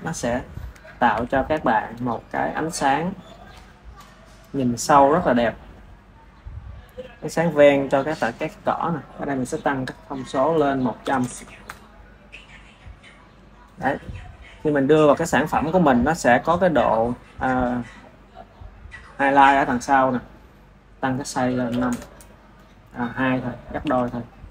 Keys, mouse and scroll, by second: 1.1 r, 5.2 click, 9.3 click, 10.1-11.2 drag, 11.2 KP_0, 21.8-24.1 drag.